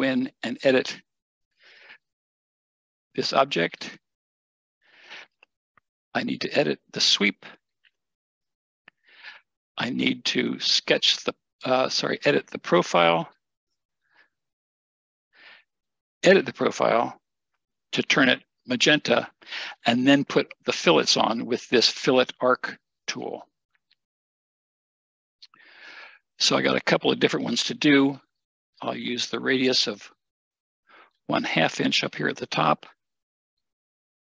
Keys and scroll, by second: 32.9-33.7 typing.